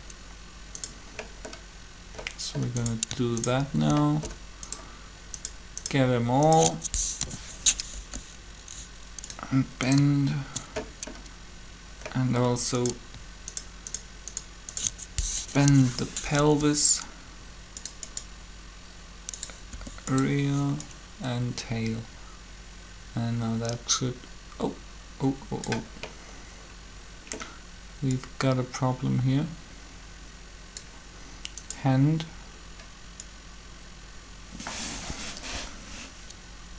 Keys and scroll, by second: 7.0 shift+7, 8.0 r, 15.5 shift+7, 16.4 r, 19.7 r.